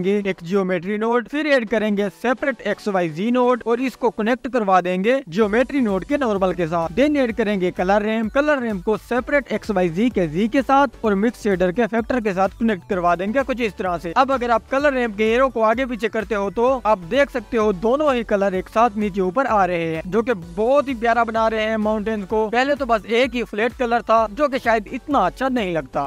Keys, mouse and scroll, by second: 2.5-3.7 drag, 5.5-7.3 drag, 7.5-9.4 drag, 10.9-11.5 drag, 11.9-13.7 drag, 15.3-16.8 drag, 16.9-18.9 drag, 20.3 click, 21.7-23.2 drag, 24.3-25.9 drag, 25.9-26.0 scroll down 2.